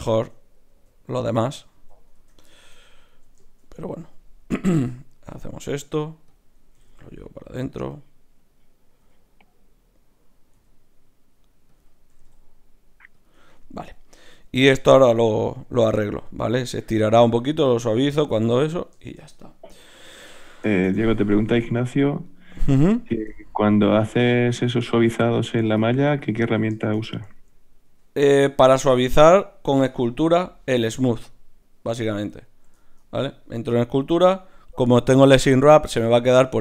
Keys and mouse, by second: 0.4 Tab, 0.7 z, 1.2 click, 1.7 z, 2.1 Tab, 2.1 click, 4.7 e, 6.3-9.9 drag, 6.7 g, 9.1 e, 12.1 g, 17.6-20.1 middle drag, 20.1 KP_Divide, 21.8 Tab, 22.3-26.0 drag, 25.4 Tab, 28.6 Tab.